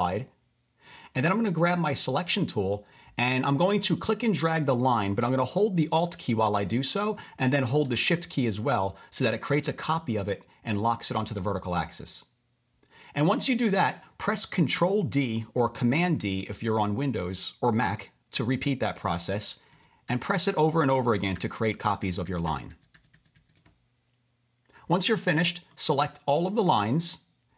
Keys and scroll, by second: 0.7 Return, 16.0 super+d, 19.0 super+d, 19.4 super+d.